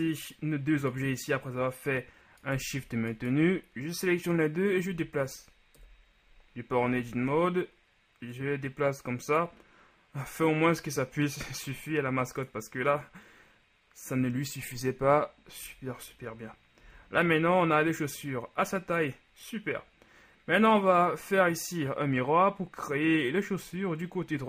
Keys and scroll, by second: 5.1 Tab, 6.0 KP_1, 7.0 a, 7.4 a, 15.8 Tab, 17.0 a.